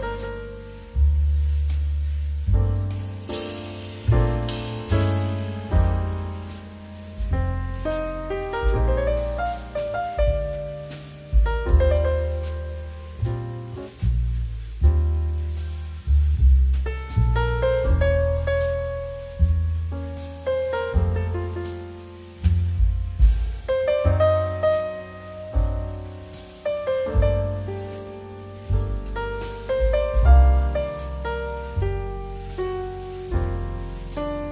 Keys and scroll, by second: 5.2 space, 6.8 space, 8.9 3, 24.1 space, 25.6 space, 27.6 space, 28.9 space, 34.3 space.